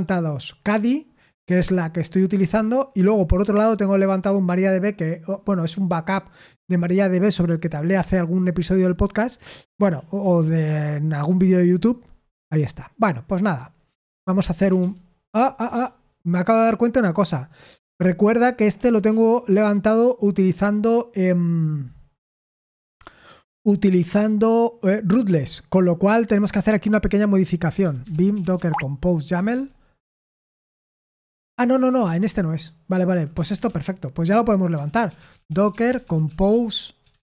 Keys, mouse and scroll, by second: 28.5 Tab, 28.5 typing, 35.6-37.3 typing.